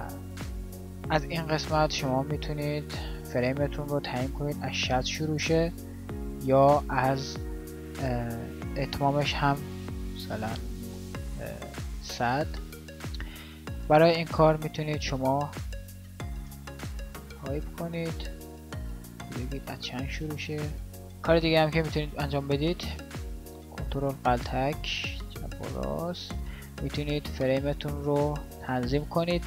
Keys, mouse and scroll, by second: 2.5-12.7 drag, 23.0-28.3 drag.